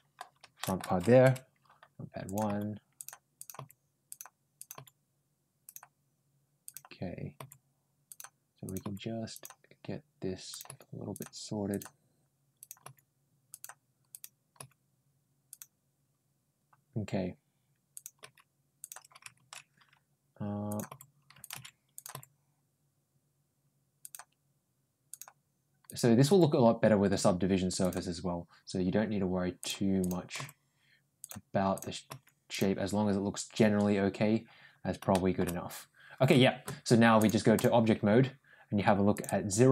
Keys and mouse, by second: 0.4 ctrl+shift+middle click, 2.1 click, 2.3 g, 3.2 click, 3.4 g, 4.4 click, 4.6 g, 6.5 click, 7.2 g, 8.5 click, 8.7 g, 10.3 click, 10.5 g, 11.5 click, 12.4 click, 12.7 g, 13.9 click, 14.4 g, 17.8 click, 18.0 g, 20.5 click, 20.7 ctrl+g, 21.8 click, 22.0 ctrl+g, 24.9 click, 25.7 click, 26.1 g, 29.4 click, 29.8 click, 31.0 g, 31.6 click, 31.9 g, 34.9 shift+middle click, 37.0 click, 39.0-39.7 drag.